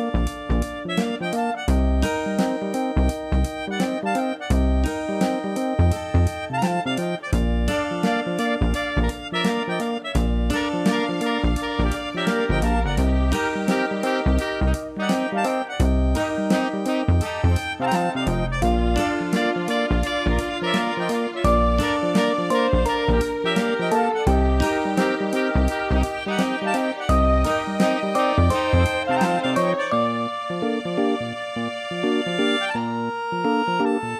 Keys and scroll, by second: 4.7 ctrl+z, 11.0 ctrl+z, 11.6 ctrl+alt+z, 14.8 ctrl+alt+z, 16.7 ctrl+z, 19.6 ctrl+z, 22.7 ctrl+z.